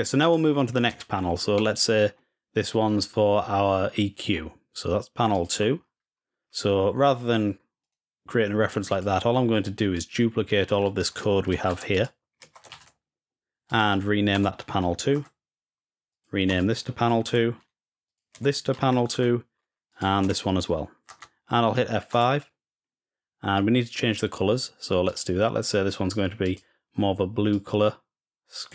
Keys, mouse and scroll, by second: 0.0-0.6 drag, 1.3 middle drag, 5.1-6.2 drag, 8.7 click, 9.7-11.0 drag, 11.5 ctrl+c, 11.7 click, 12.5 ctrl+v, 13.5 click, 15.9 click, 16.4 click, 18.5 click, 19.7 click, 24.8 click, 26.2 click, 27.3-28.5 drag.